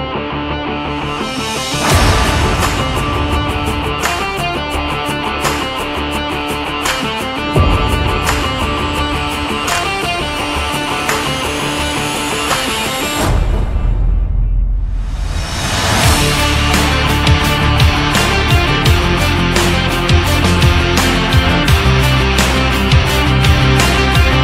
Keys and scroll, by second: 3.1 Down, 8.9 ctrl+z, 10.0 shift+Down, 10.8 Down.